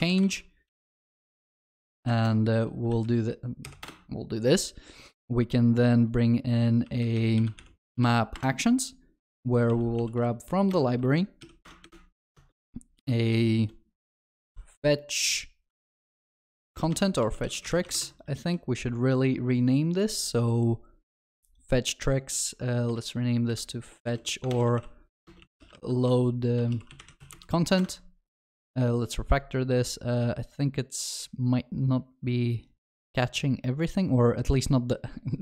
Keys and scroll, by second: 8.4 Return, 18.5 ctrl+b, 22.9 shift+F6, 28.0 ctrl+BackSpace.